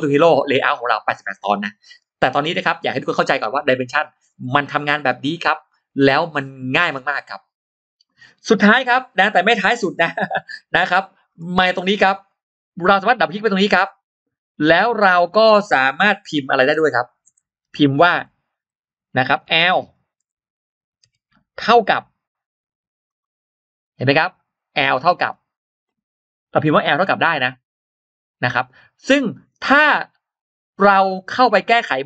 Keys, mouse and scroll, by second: 11.1-11.4 scroll up 2, 11.9 click, 12.2 click, 12.8-13.1 scroll up 1, 13.2 click, 13.5-14.7 drag, 22.9 click, 23.9 scroll down 1, 23.9 space, 23.9 l, 23.9 BackSpace, 24.6 click, 25.0 scroll down 2, 25.6 scroll up 2, 26.2 scroll up 2, 27.1-27.5 scroll down 2.